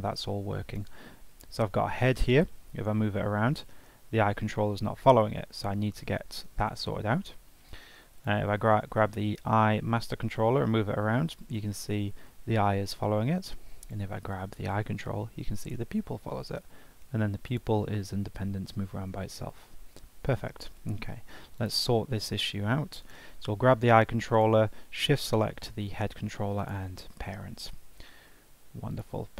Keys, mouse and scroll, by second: 0.7 click, 2.4 g, 8.2 click, 10.0 g, 13.8 click, 15.0 g, 17.5 click, 18.1 g, 20.2 ctrl+Tab, 21.5-22.2 drag, 22.2 Tab, 23.0 click, 24.3 shift+click, 26.0 ctrl+p, 27.7 Tab, 28.5 ctrl+Tab, 28.9 click.